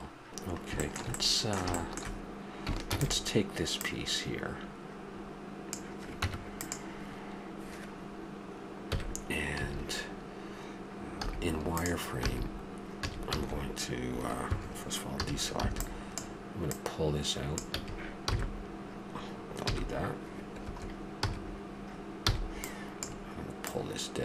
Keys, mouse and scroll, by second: 0.0 x, 0.6 middle drag, 2.9 shift+d, 3.8-5.5 drag, 6.2 Tab, 8.9 KP_1, 9.6 a, 11.2 z, 12.2 b, 15.2 a, 15.6 b, 16.7-18.6 drag, 17.7 a, 18.3 b, 18.3 n, 21.2 n, 22.3 b, 23.6-24.2 drag.